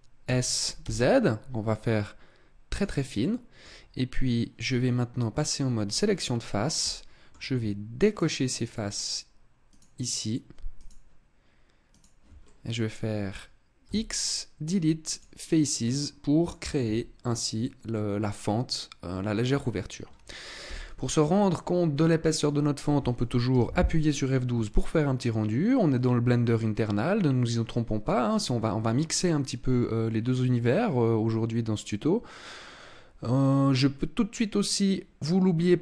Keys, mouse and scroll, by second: 0.2 s, 2.8 click, 3.2 middle click, 5.8 click, 6.8 middle click, 8.0 shift+right click, 8.8 shift+right click, 9.6 shift+right click, 10.7 shift+right click, 11.8 shift+right click, 12.4 middle click, 13.8 x, 15.8 middle click, 16.8 Tab, 17.5 scroll down 2, 17.9 middle click, 19.1 scroll down 2, 19.4 scroll up 3, 20.6 KP_0.